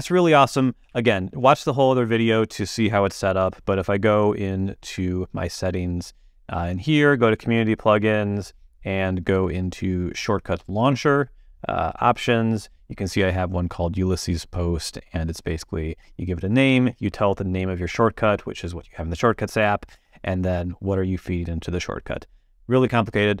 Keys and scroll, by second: 1.8 super+h, 3.1 super+,.